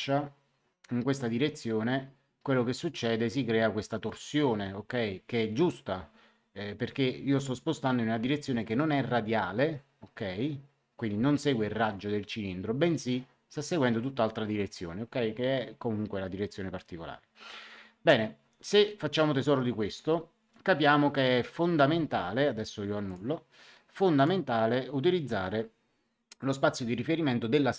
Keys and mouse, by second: 23.0 click, 24.1 click.